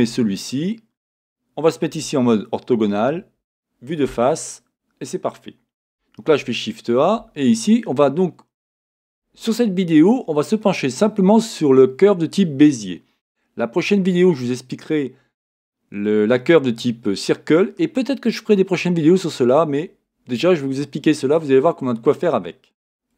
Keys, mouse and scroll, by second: 0.0 x, 1.9 KP_1, 6.2 shift+a.